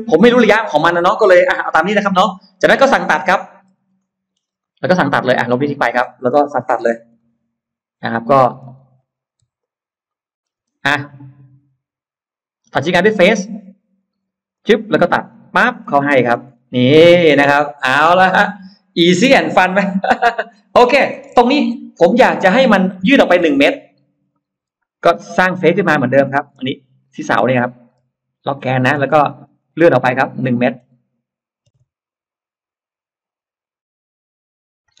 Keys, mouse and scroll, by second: 1.2 ctrl+y, 2.9-3.9 scroll up 2, 3.9 middle click, 4.3-4.7 scroll up 2, 4.4 middle click, 5.3 click, 5.5 click, 6.0-6.4 scroll down 2, 6.6 Delete, 7.0-8.2 middle drag, 8.4 scroll down 1, 8.8-9.2 scroll up 2, 9.2 middle click, 9.4 e, 9.4 click, 10.2 middle click, 10.5 space, 13.0 click, 13.7 middle click, 14.4 click, 15.2 click, 15.6 middle click, 15.6-16.6 scroll down 2, 16.0 space, 16.1 middle click, 16.8 middle click, 17.0-18.0 scroll down 5, 17.8 middle click, 18.8-19.2 scroll down 1, 19.0 middle click, 20.3 scroll down 1, 20.7 middle click, 21.4-23.0 scroll up 3, 22.8 middle click, 23.2-23.6 scroll down 2, 23.6-24.3 scroll up 4, 24.6 r, 25.0 click, 26.1 scroll down 2, 27.8 Left, 28.4 click, 28.8 scroll down 1, 28.8 space, 29.1 click, 29.7 scroll down 1, 30.0 middle click, 31.6 m, 34.7 scroll down 2.